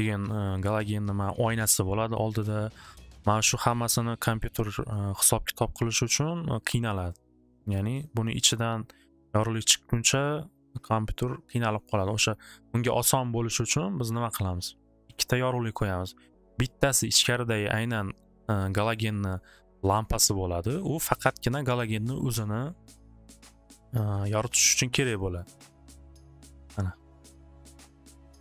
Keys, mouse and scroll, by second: 2.1 middle click, 4.0 middle click, 4.5 scroll, 8.0 click, 9.2 click, 11.3 click, 12.3 scroll, 15.0 click, 23.5 click, 24.1 click, 24.5 click, 25.5 click, 26.1 middle click.